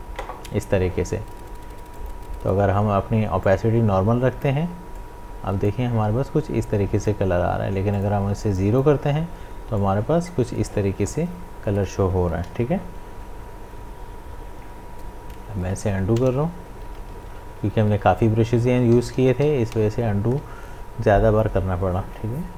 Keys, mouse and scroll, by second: 2.0-7.9 drag, 7.9-12.4 drag, 12.4 ctrl+z, 20.5 ctrl+z.